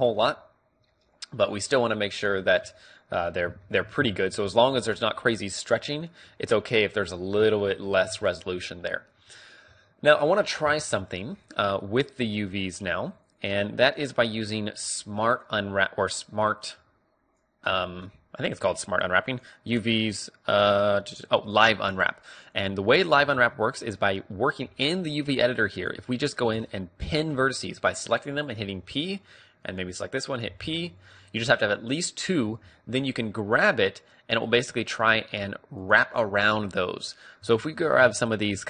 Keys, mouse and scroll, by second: 4.1 Tab, 7.5 click, 7.5 KP_3, 8.1 Tab, 11.2 middle click, 14.3-15.8 drag, 16.8-17.9 drag, 17.9-19.8 middle drag, 19.8-23.4 drag, 23.4 a, 25.9-28.7 middle drag, 28.7 p, 29.7-33.6 right drag, 30.6 p, 32.6 g, 37.5-38.5 drag, 37.5 a, 38.5-38.6 right drag.